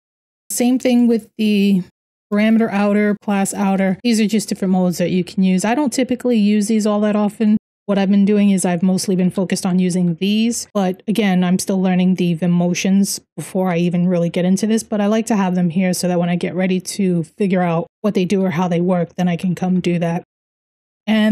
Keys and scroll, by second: 0.0-0.3 typing, 2.0-15.6 typing, 16.9-21.3 typing.